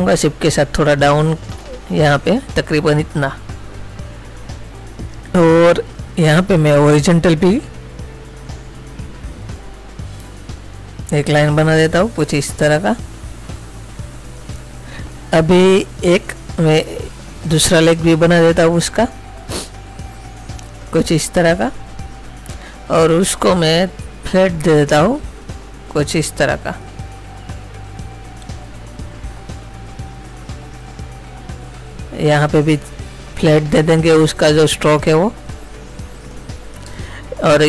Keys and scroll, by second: 37.1 space.